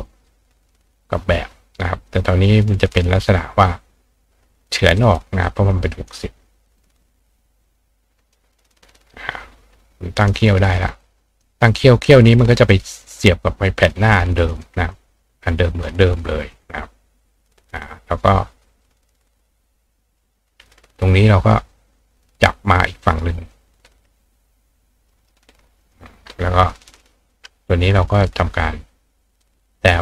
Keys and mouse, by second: 0.1-2.1 drag, 2.9 click, 5.0 click, 5.4-6.1 drag, 7.1-8.3 drag, 9.4 click, 10.6 click, 11.3 click, 14.5 click, 14.9 click, 16.6-17.5 drag, 23.3-25.3 drag, 25.1 ctrl+right click, 25.6 click, 25.9-26.8 drag, 27.0-27.3 drag, 27.4-29.7 drag, 29.8 click.